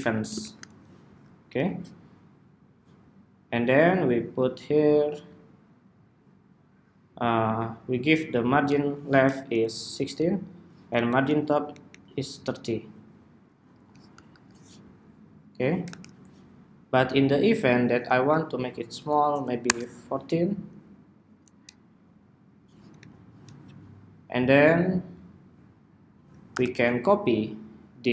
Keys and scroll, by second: 8.3 alt+Right, 8.5 alt+Right, 10.1 alt+shift+Down, 13.3 super+-, 14.9 super+=, 22.0 alt+Up, 25.7 super+-.